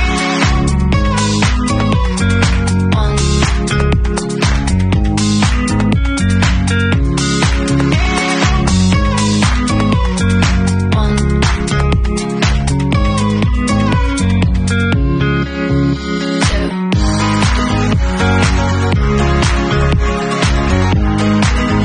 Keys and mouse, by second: 4.5-11.3 drag, 11.3-13.0 middle drag, 13.0-17.7 drag, 17.7-18.7 middle drag, 18.3 r, 18.7-21.8 drag, 19.6 w.